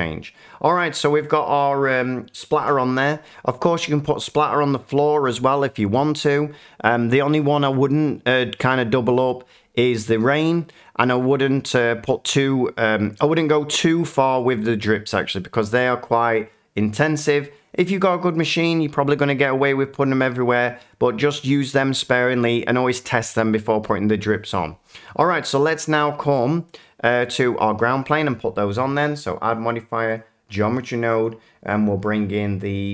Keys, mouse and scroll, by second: 0.6-2.7 middle drag, 25.8 middle click, 26.3 shift+middle click, 26.8 middle click, 27.4 click, 27.8 shift+middle click, 29.0 click, 30.1 click, 31.2 click.